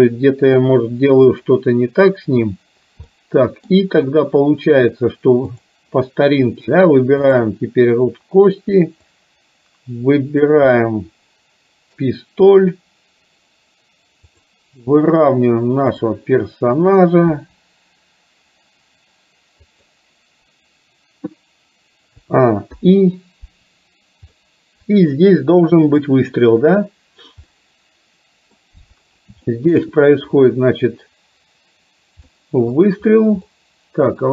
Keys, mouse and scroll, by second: 1.5 click, 3.1 middle click, 5.5 click, 7.3 shift+click, 9.2-10.7 drag, 10.8-12.1 middle drag, 14.3 click, 17.3 r, 22.2 a, 22.8 i, 24.5 middle click, 26.0 click, 27.6-28.7 middle drag, 29.5-30.0 shift+middle drag, 32.3-32.8 middle drag, 33.6-34.1 middle drag.